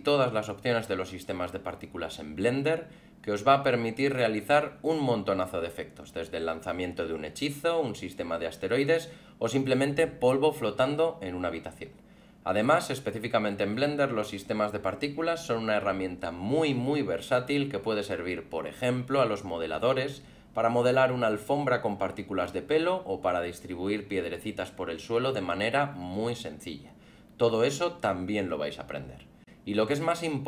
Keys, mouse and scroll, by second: 0.2 alt+middle click, 1.1 alt+middle click, 4.3 alt+a, 7.9 click, 8.4 scroll up 1, 14.5 alt+middle click, 17.7 scroll down 2, 18.8 alt+a, 19.1 alt+middle click, 19.5 scroll up 2, 21.0 click, 22.1 middle click, 22.7 scroll up 2, 23.0 f, 23.6 click, 23.7 middle click, 23.9 alt+middle click, 24.3 click, 24.4 click, 24.5 click, 24.7 click, 24.9 click, 25.0 click, 25.1 click, 25.2-25.6 click, 25.3 click, 25.4 click, 25.5 click, 25.7 middle click, 25.8 scroll up 4, 26.1 middle click, 26.3 alt+middle click, 27.8 middle click, 28.1 scroll down 3, 28.2 alt+middle click, 28.7 middle click, 29.0 scroll down 1, 29.1 alt+middle click, 29.7 click, 30.0 click, 30.2 click, 30.3 click, 30.4 click.